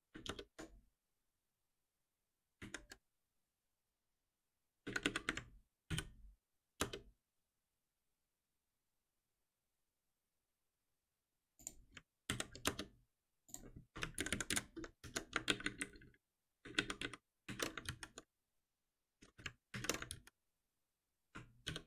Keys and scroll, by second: 5.9 ctrl+alt+p, 12.3 alt+Delete, 14.2 ctrl+shift+Left, 15.0 ctrl+shift+Left, 15.3 ctrl+c, 17.4 ctrl+w, 20.1 ctrl+w, 21.6 shift+F10.